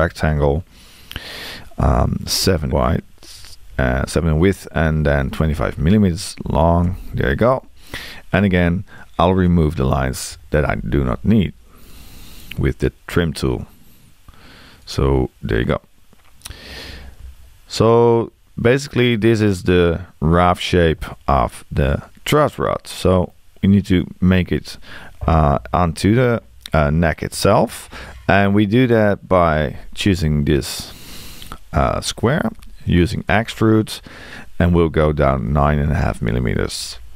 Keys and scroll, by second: 2.6 7, 6.8 Return, 10.3 t, 33.3 e.